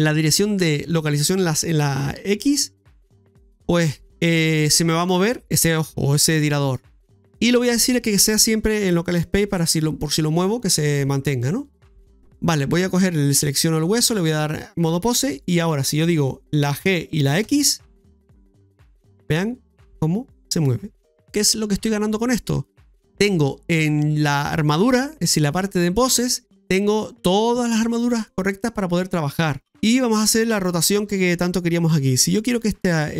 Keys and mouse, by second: 13.0 right click, 13.8 click, 23.1 middle click, 26.5 middle click, 28.5-29.9 middle drag, 32.9 right click.